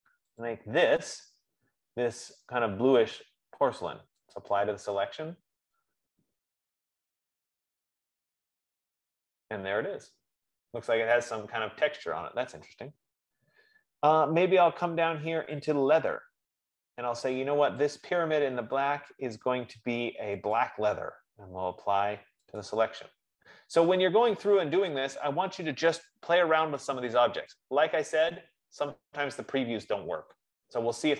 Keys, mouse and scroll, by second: 0.6 scroll down 5, 1.1 click, 2.6 right click, 4.8 click, 16.0 click, 18.3 click, 21.0 right click, 23.0 click, 29.3 click.